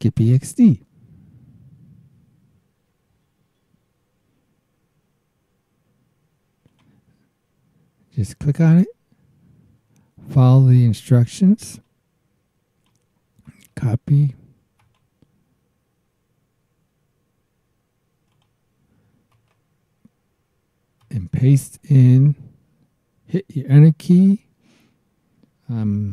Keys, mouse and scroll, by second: 1.3 scroll down 1, 6.7 click, 9.5-9.9 scroll down 1, 11.8-13.0 drag, 13.5 right click, 14.8 click, 18.3 click, 19.3 right click, 21.0 click, 25.9 super+w.